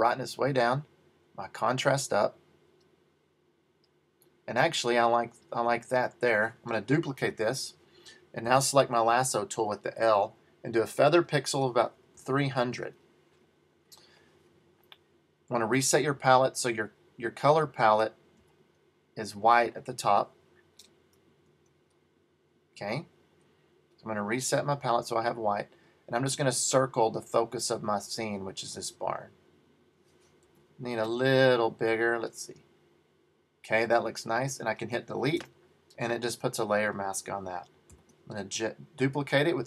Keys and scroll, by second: 7.3 super+j, 21.5 BackSpace, 21.7 BackSpace, 30.5 super+d, 35.5 BackSpace, 38.0 super+j.